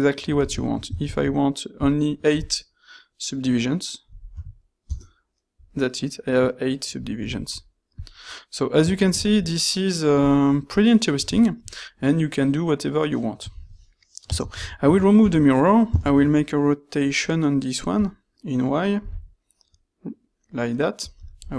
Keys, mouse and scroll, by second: 1.0 ctrl+shift+q, 14.4 ctrl+shift+q.